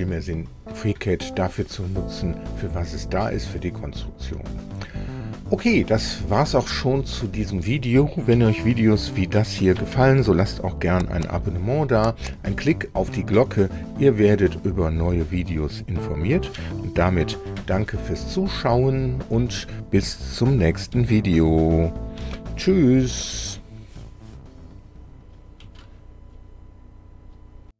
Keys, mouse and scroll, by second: 6.2-7.3 drag, 9.8 2, 17.5 3, 22.2 4, 27.7 r.